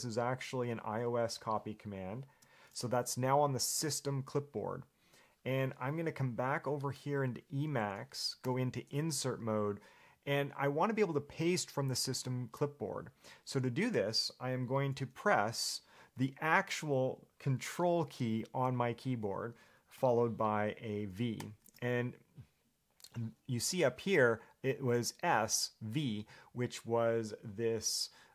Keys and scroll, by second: 9.2 i, 21.6 super+v.